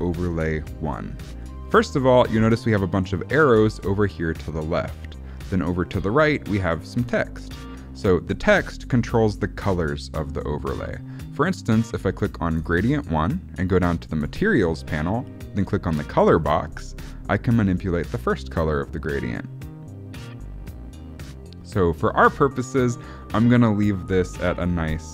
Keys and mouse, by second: 12.5 click, 16.3 click.